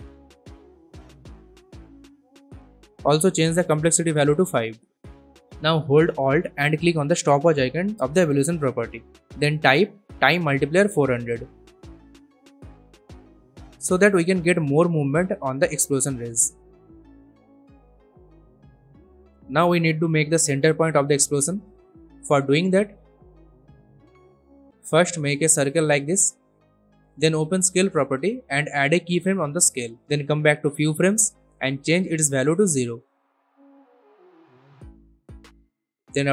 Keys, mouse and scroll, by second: 4.6 5, 5.2 Return, 5.4 click, 7.5-8.8 typing, 9.8 shift+8, 11.7-12.7 typing, 13.5 click, 14.6 space, 17.1 space, 17.4-18.1 click, 18.1 scroll up 1, 19.0 click, 21.9-22.5 drag, 27.0 click, 27.9 s, 28.2-29.8 drag, 31.2 0, 31.4 Return, 32.8-35.9 drag.